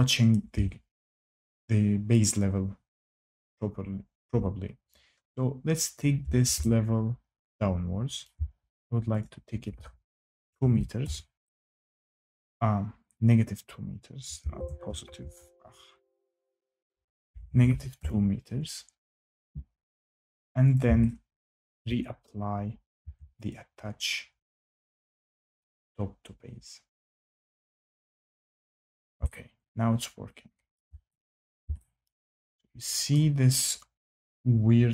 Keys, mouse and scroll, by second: 0.2 shift+middle click, 3.5 click, 8.2 shift+right click, 8.4 scroll down 3, 9.1 click, 10.1-11.1 typing, 14.2-15.5 typing, 14.3 ctrl+z, 15.1 Escape, 16.2 click, 16.4 click, 17.0-18.1 typing, 20.7 click, 21.0-22.2 typing, 21.7 shift+right click, 22.9 Tab, 23.4 click, 25.5 click, 27.3 click, 30.7 shift+right click, 31.1 click, 31.4 scroll down 5, 33.0 shift+right click, 33.0 scroll.